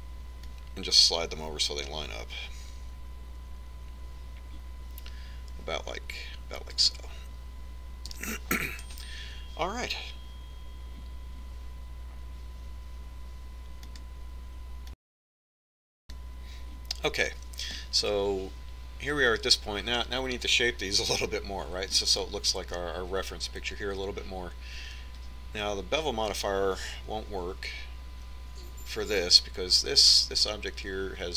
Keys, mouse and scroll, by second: 1.5-3.3 drag, 9.2 KP_1.